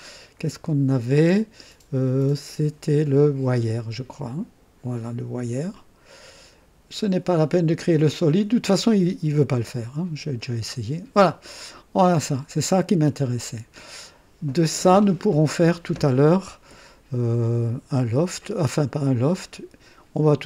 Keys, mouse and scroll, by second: 3.7 click, 5.7 click, 10.4 click, 11.7-14.1 drag, 14.7 scroll down 1.